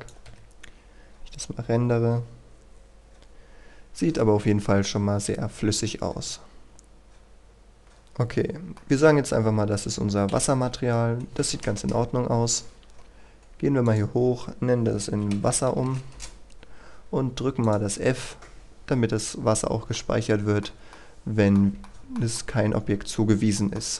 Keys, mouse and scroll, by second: 0.3 F12, 6.7-7.4 scroll down 1, 8.4 scroll up 1, 8.7 middle click, 10.3 Escape, 11.9 KP_1, 12.4-13.9 scroll up 1, 13.9 click, 14.9 typing, 16.1 Return, 17.6 click, 19.9-21.7 middle drag, 21.8-23.9 shift+middle drag, 23.9 scroll up 1.